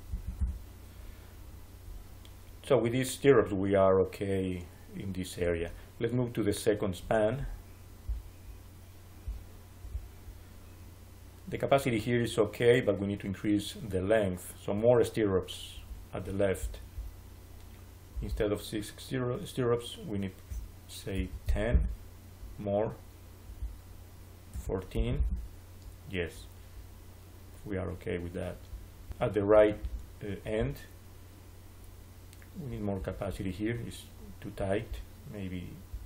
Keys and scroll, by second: 0.0 5, 0.3 Return, 21.0 1, 21.6 Return, 24.4 1, 24.8 4, 25.0 Return.